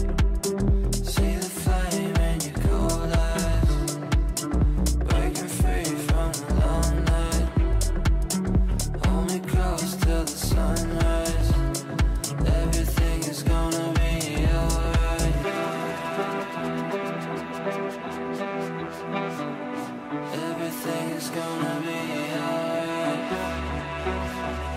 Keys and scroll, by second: 0.6 c, 0.8 e, 3.0 c, 12.7 c.